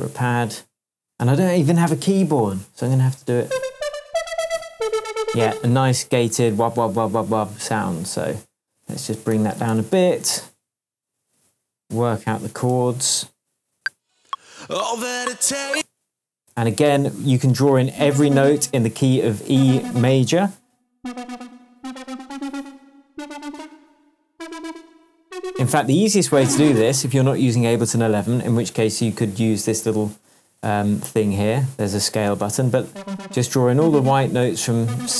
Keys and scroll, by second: 3.1-4.7 typing, 9.3 -, 9.5 6, 9.7 Return, 12.7 shift+super+m, 13.7 shift+super+space, 15.7 space, 16.8 p, 22.2 Up, 23.5 Up, 26.8 BackSpace.